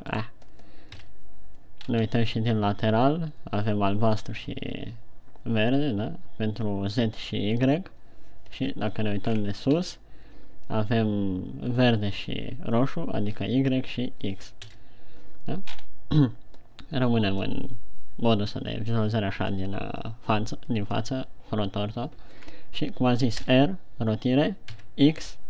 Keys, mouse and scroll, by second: 0.5 right click, 1.4 KP_3, 2.3-2.6 scroll up 3, 9.0 KP_7, 9.7-10.6 scroll down 6, 15.1 KP_1, 16.1-16.6 scroll up 4, 22.9-23.8 scroll down 1, 23.8 r.